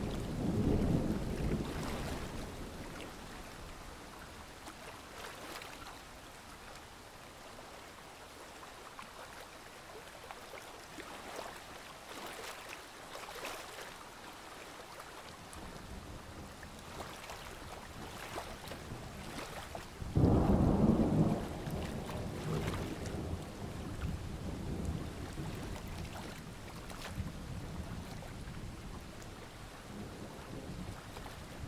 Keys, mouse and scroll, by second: 2.7 KP_1, 2.8 KP_0, 3.6 click, 8.7-9.8 alt+scroll down 1, 9.8 click, 10.6 alt+scroll up 1, 11.7 alt+scroll up 1, 12.0-12.6 scroll down 1, 12.6-14.5 ctrl+scroll up 1, 14.5 click, 21.0 alt+scroll down 1, 21.2-22.0 alt+scroll up 1, 22.0 scroll up 1, 22.6 click, 23.8 ctrl+g, 24.1 click, 25.9 click, 29.7-30.4 alt+scroll up 1, 30.4 click.